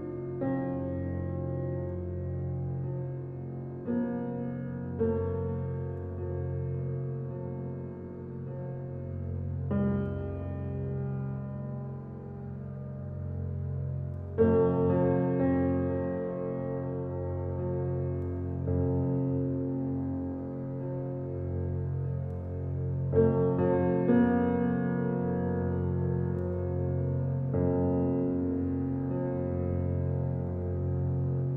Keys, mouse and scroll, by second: 1.4 click, 1.8-2.4 scroll down 1, 2.4-5.1 middle drag, 5.1 drag, 6.5 shift+d, 8.8 click, 9.1-9.9 scroll down 1, 9.9 click, 11.7 shift+click, 12.2 shift+click, 12.8 shift+click, 13.7 s, 15.8 click, 16.3-18.8 middle drag, 18.8-19.7 scroll up 2, 19.7-20.2 shift+middle drag, 20.2 drag, 20.7-21.6 middle drag, 21.6 Tab, 22.2 click, 23.2 s, 25.9 click, 26.2 Tab, 26.8-27.6 middle drag, 27.6-28.1 scroll down 2, 28.1 drag, 28.9-29.9 middle drag, 29.9 g.